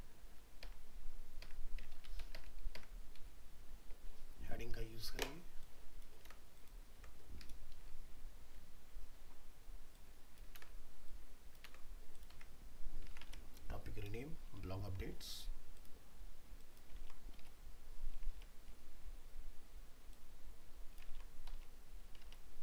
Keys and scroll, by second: 6.2 ctrl+c, 7.0 ctrl+v, 10.6 ctrl+c, 11.7 ctrl+v, 12.3 alt+Tab, 17.0 ctrl+c, 17.4 alt+Tab, 21.1 ctrl+v, 21.5 alt+Tab.